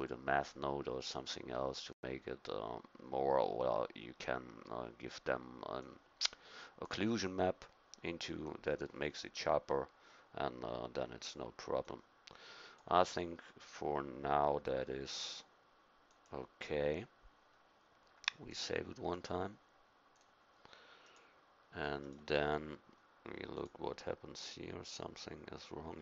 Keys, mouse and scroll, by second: 5.8-7.2 drag, 11.4-12.5 drag, 12.2 typing, 12.6 click, 13.1 middle click, 16.2-19.7 drag.